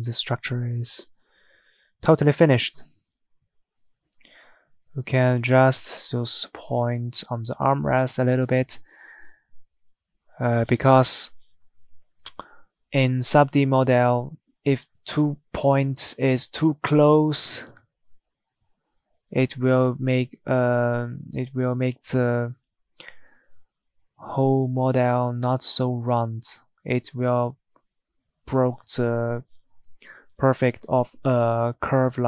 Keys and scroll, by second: 29.6 Tab.